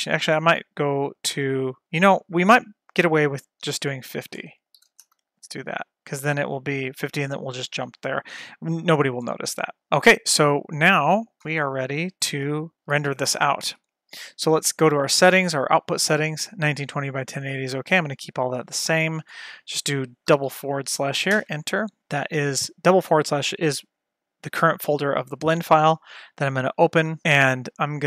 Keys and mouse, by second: 1.2-2.6 drag, 4.1-5.7 drag, 6.7-9.2 drag, 9.7 shift+middle click, 11.6 F12, 12.0 click, 12.7 F12, 13.8 ctrl+s, 15.8 click, 19.3 click, 20.6 /, 26.7 click.